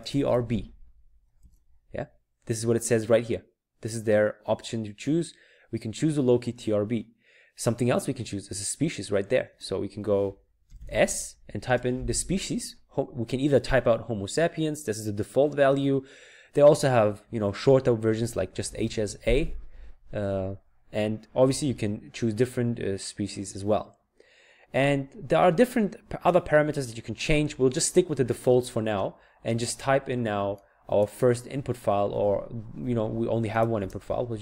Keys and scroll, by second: 0.0-1.5 typing, 11.3-12.1 typing, 18.5-19.3 typing.